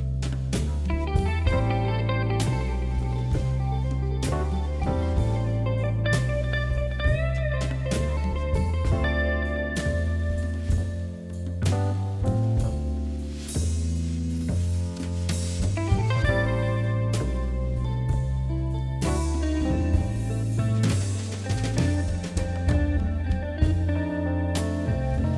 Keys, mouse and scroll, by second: 0.4 middle click, 1.1 scroll down 1, 1.3-2.8 middle drag, 3.4 KP_1, 3.8 KP_3, 4.2-5.2 scroll up 3, 5.2 shift+z, 5.5 click, 6.6 g, 8.2 ctrl+KP_Add, 8.3 ctrl+KP_Add, 8.8 ctrl+KP_Subtract, 9.1 scroll up 1, 9.8 r, 11.1 g, 13.5 ctrl+KP_Subtract, 14.9 g, 16.3 r, 17.9 click, 18.9 shift+z, 19.1 scroll down 3, 19.4 middle click, 20.0 click, 20.1 scroll down 4, 20.3 middle click, 20.9 scroll up 3, 21.3 KP_1, 21.5 shift+z, 21.9-22.2 scroll up 1, 22.2 shift+z, 22.4 middle click, 22.8 scroll up 2, 23.4 shift+middle click, 24.2 3, 24.4 click, 24.9 KP_1.